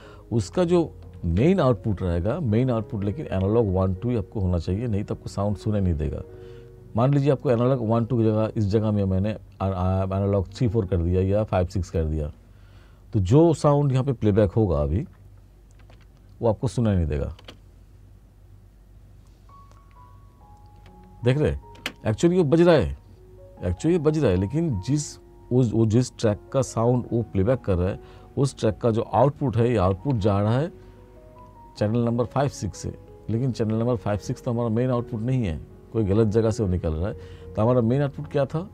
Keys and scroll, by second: 1.3 ctrl+=, 15.9 ctrl+=, 17.5 space, 21.9 space, 30.0 ctrl+=.